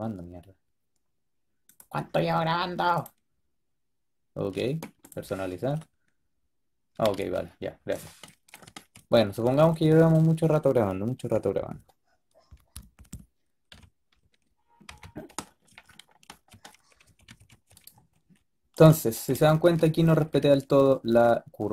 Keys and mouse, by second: 8.3 click, 12.8 middle click, 13.6 KP_3, 14.8 KP_5, 16.9 a, 17.4 a, 19.4-20.6 middle drag.